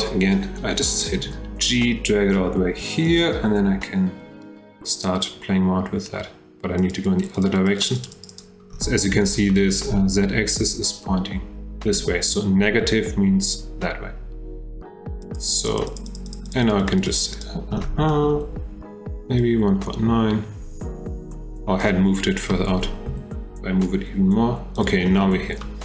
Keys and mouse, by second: 1.2 g, 4.9 click, 6.8 click, 7.0 click, 7.4 click, 7.8 click, 8.1 click, 8.3 click, 9.5 shift+drag, 9.7 shift+middle drag, 15.3 click, 15.5 click, 15.7 click, 15.9 click, 16.1 click, 16.5 click, 16.9 click, 17.1 click, 17.4 click, 18.1 shift+middle drag, 19.4-21.8 drag, 23.1 g, 25.6-25.8 shift+middle drag.